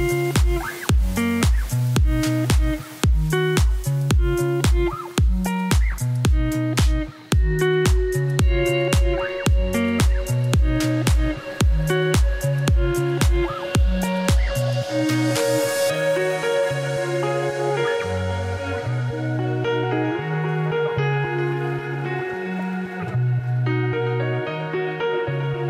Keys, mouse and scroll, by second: 3.6 scroll down 1, 3.9 middle click, 4.1 Tab, 4.3-5.0 scroll down 2, 5.0 s, 6.1 ctrl+a, 7.3 shift+right click, 7.5 middle click, 7.8 scroll down 1, 7.8 scroll up 3, 8.0 shift+middle click, 8.1 shift+a, 9.2 Tab, 9.4 1, 9.5 s, 10.7 f, 11.7-12.1 scroll up 1, 12.1 middle click, 12.4 g, 12.8 middle click, 13.6 x, 18.2 middle click, 18.5 click, 18.8 Tab, 21.1 middle click, 21.6 s, 21.9 middle click, 22.7-23.3 scroll up 1, 23.3 KP_3, 23.9 shift+middle click, 24.1-25.4 scroll up 3, 25.4-25.6 scroll up 1.